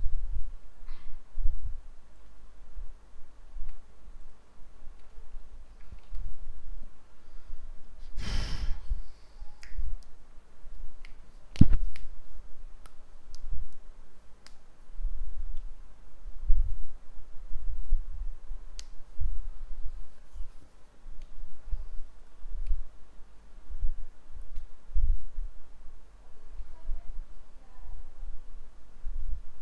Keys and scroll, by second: 2.3 ctrl+v.